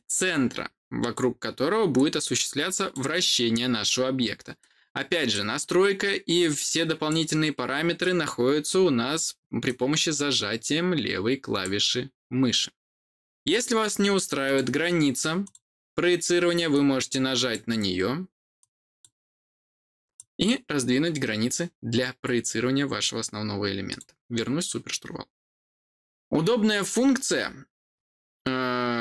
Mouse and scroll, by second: 1.9 click, 4.5 click, 6.3 click, 7.9 click, 9.6-11.5 drag, 14.4 click, 15.3 click, 16.6 click, 18.5 click, 20.1 click, 23.8 click.